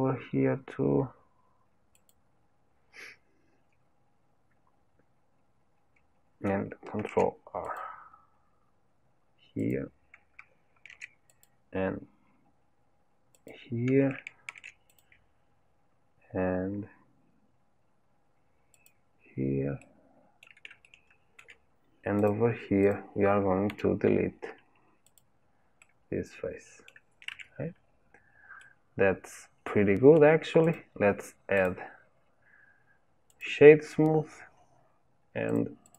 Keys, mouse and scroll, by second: 7.0 ctrl+r, 10.8 ctrl+r, 14.5 ctrl+r, 19.8-22.3 middle drag, 22.3 click, 22.8 click, 23.7 Delete, 25.8-27.3 middle drag, 27.3 Tab, 27.7-28.2 scroll down 2, 28.6-30.6 middle drag, 30.6 click, 31.5-34.0 drag, 34.0 scroll down 1, 35.5 click, 35.8 click.